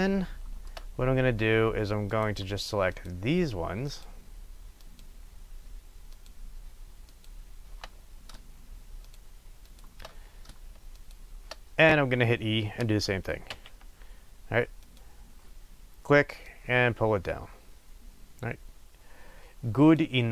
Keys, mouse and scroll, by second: 1.0-2.1 scroll up 1, 2.1 click, 2.9 shift+click, 8.0 scroll up 1, 9.0 shift+click, 11.8 scroll down 1, 15.0 click.